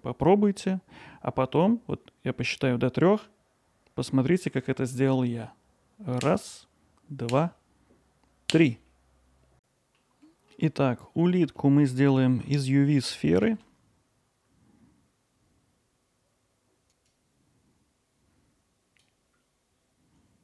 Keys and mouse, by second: 10.0-10.5 middle drag, 11.1 ctrl+alt+middle click, 11.6-11.9 middle drag, 14.9 middle drag, 15.0 alt+middle click, 15.7 middle click, 16.1 KP_7, 16.7 alt+z, 17.0-17.5 drag, 18.1-19.4 drag, 19.6 middle click.